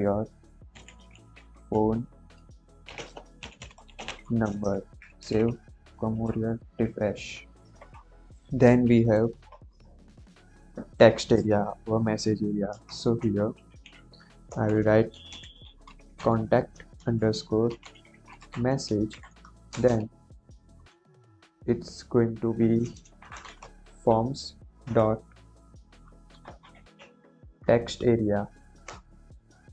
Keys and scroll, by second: 0.4-4.7 typing, 4.7 ctrl+s, 12.7 Return, 13.5 shift+', 14.4 Left, 14.8-19.7 typing, 19.0 Right, 22.9-24.8 typing, 26.0-27.4 typing, 28.8 Return, 29.6-29.7 typing.